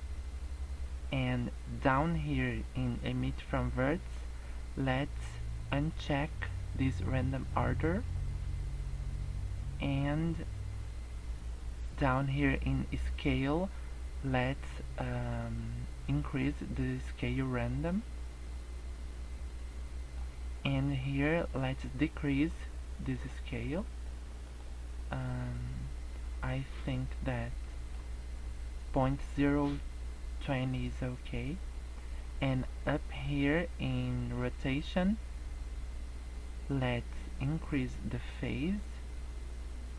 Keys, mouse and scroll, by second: 0.3-1.7 scroll down 5, 7.4 click, 8.3 scroll down 1, 9.0-10.3 scroll down 5, 10.3 scroll up 2, 10.7-11.9 scroll down 2, 11.9-12.5 scroll down 1, 12.5 scroll down 1, 17.7 click, 23.1 click, 23.6 click, 24.4 click, 25.3 scroll down 1, 25.4 middle click, 27.6 middle click, 31.6-33.2 scroll up 6, 37.9 click.